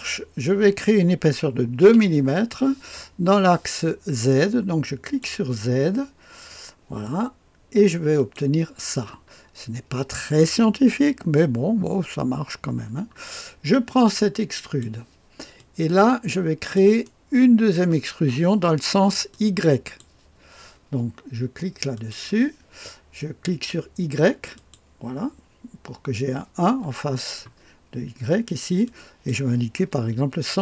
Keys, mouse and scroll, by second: 1.8 KP_2, 5.0 click, 8.1 click, 9.3-13.0 scroll up 2, 13.0-14.6 scroll down 2, 14.6 click, 15.5-16.7 drag, 17.2-17.5 scroll, 17.8 right click, 19.3 click, 21.9 click, 24.5 click, 28.8-29.9 drag, 30.1 KP_1.